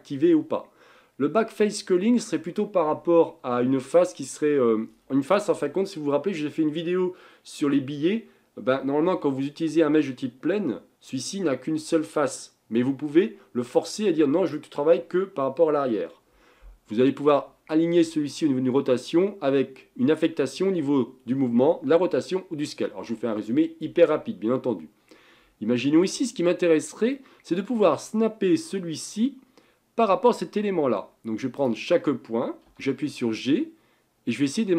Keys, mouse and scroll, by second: 24.6-26.0 scroll up 4, 26.0 Tab, 27.1-30.1 middle drag, 31.6 click, 32.7 g.